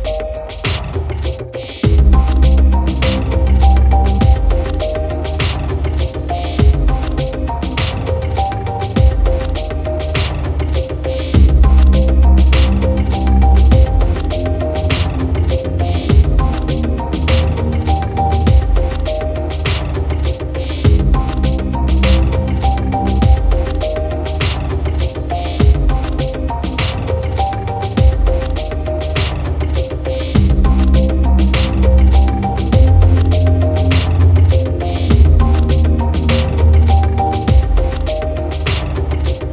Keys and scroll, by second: 14.5 ctrl+-, 19.5 ctrl+=, 24.5 ctrl+alt+z, 36.4 ctrl+0.